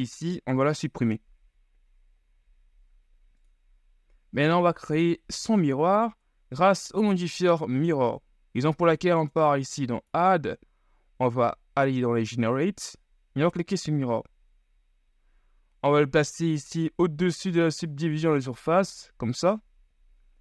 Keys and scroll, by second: 1.4 l, 2.5 Delete, 6.3 Tab.